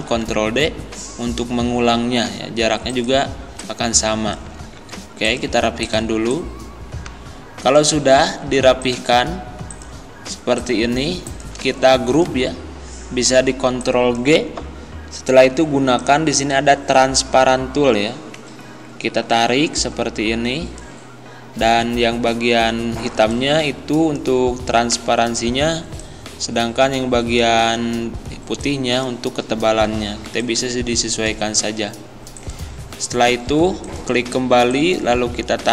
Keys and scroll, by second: 0.1 ctrl+d, 4.6 ctrl+z.